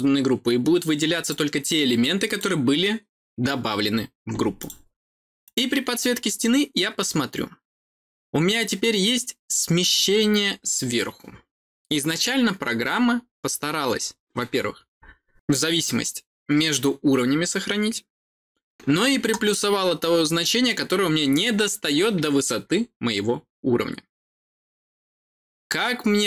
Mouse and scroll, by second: 1.1 click, 1.6 click, 4.5 click, 5.4 click, 6.9-26.2 middle drag, 6.9-10.8 scroll down 1, 10.8-12.2 scroll down 1, 12.2-14.2 scroll down 1, 14.2-16.8 scroll down 1, 16.8-18.7 scroll down 1, 18.7-21.5 scroll down 1, 21.5-26.2 scroll down 1.